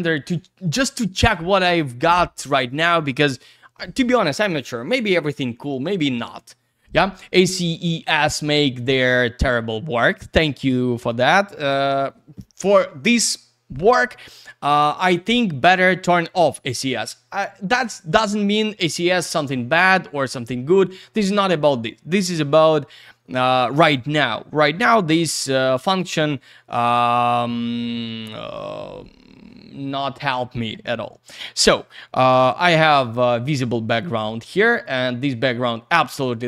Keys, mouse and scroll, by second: 10.2 click, 16.4 click, 25.5 click, 25.9 click, 26.0 double click, 34.8 click.